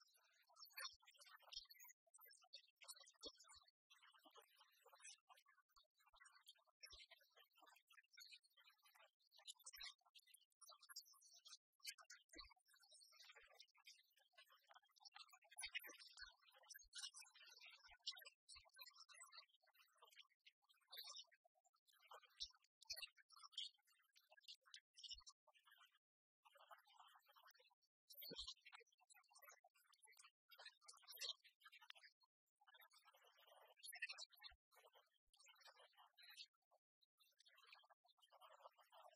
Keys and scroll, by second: 12.0 ctrl+j, 15.2 ctrl+t.